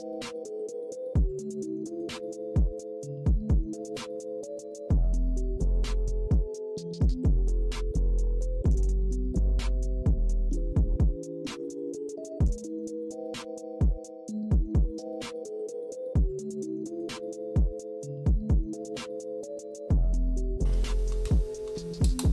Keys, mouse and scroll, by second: 0.4 -, 0.6 =, 0.8 scroll up 1, 1.1 click, 1.9 click, 2.6-4.8 drag, 5.4 click, 6.3 click, 6.9 click, 7.5 click, 8.3 ctrl+-, 8.5 =, 9.1-10.9 drag, 11.0 click, 11.9 click, 12.6 ctrl+-, 12.7 scroll up 3, 12.9 =, 13.2-15.9 drag, 15.9 -, 16.1 scroll down 1, 16.2 =, 16.4 scroll up 2, 16.7 click, 17.0 click, 17.6 click, 17.8 click, 18.1 click, 18.5 -, 19.3 click, 19.5 click, 20.0 click, 20.4 ctrl+-, 22.0-22.3 drag.